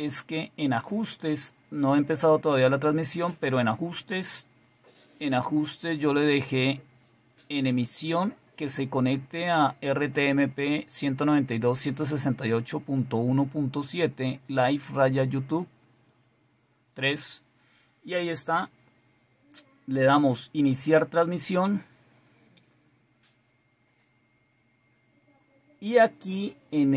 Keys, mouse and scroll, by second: 7.5 click, 8.2 click, 16.1 click, 21.4 click.